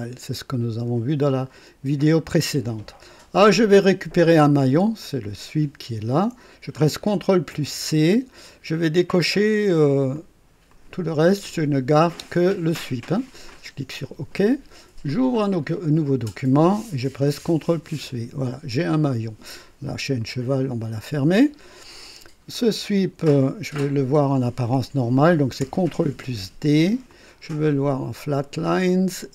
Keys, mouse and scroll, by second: 5.0 click, 7.5 ctrl+c, 8.9 click, 10.1 click, 10.7 click, 11.9 click, 14.0 click, 15.6 click, 17.4 ctrl+v, 20.2 click, 22.5 click, 25.6 ctrl+d, 27.1 click, 27.7 click, 28.9 click.